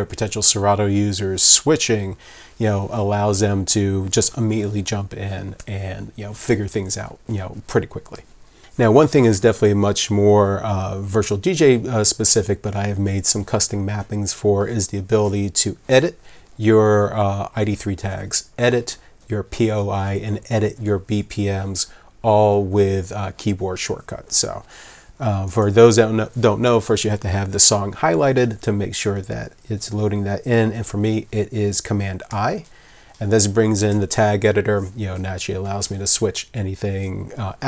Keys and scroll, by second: 32.3 super+i.